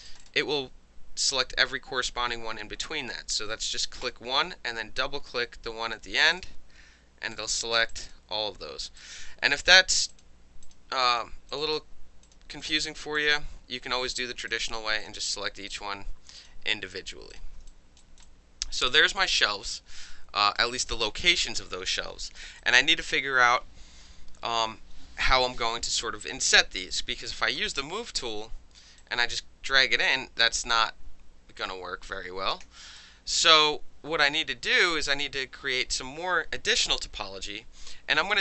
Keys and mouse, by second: 0.1 shift+click, 0.3-4.0 shift+middle drag, 4.0 shift+click, 4.1-6.2 shift+middle drag, 6.2 shift+click, 6.3-7.9 shift+middle drag, 6.3 shift+click, 7.3 shift+click, 7.9 shift+click, 8.0 shift+middle click, 8.0 shift+click, 8.5-9.0 shift+middle drag, 9.0 shift+click, 9.1 shift+middle click, 9.6 shift+click, 9.7-10.1 shift+middle drag, 10.1 shift+click, 10.2 shift+middle click, 10.6 shift+click, 10.7-11.1 shift+middle drag, 11.1 shift+click, 11.2-11.5 shift+middle drag, 11.5 shift+click, 11.6 shift+middle click, 12.2 shift+click, 12.3 shift+middle drag, 12.6 shift+click, 12.7-13.2 shift+middle drag, 13.2 shift+click, 13.2-14.1 shift+middle drag, 14.1 shift+click, 14.1-14.5 shift+middle drag, 14.5 shift+click, 14.6-15.7 shift+middle drag, 15.0 shift+click, 15.7 shift+click, 15.8-16.4 shift+middle drag, 16.4 shift+click, 16.5-17.7 shift+middle drag, 16.9 shift+click, 17.3 shift+click, 17.7 alt+click, 18.0 alt+middle click, 18.2 alt+click, 18.8 alt+middle click, 18.9 alt+right click, 19.0 alt+middle click, 19.2-20.6 alt+drag, 20.6 alt+middle drag, 20.8 alt+right drag, 21.1 alt+middle click, 21.6-22.4 alt+drag, 22.4 alt+middle click, 22.6-23.1 alt+drag, 27.6 w, 28.1 alt+drag, 29.0-30.4 drag, 30.7-31.7 alt+drag, 32.6 ctrl+z, 33.0-33.4 alt+drag.